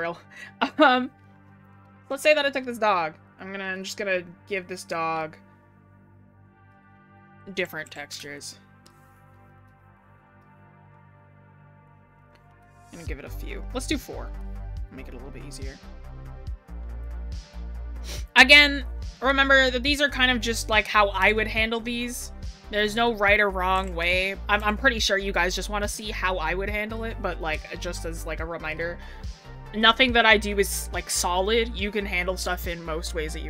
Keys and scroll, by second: 12.3 scroll down 1, 17.6 scroll up 1, 18.5 scroll down 1.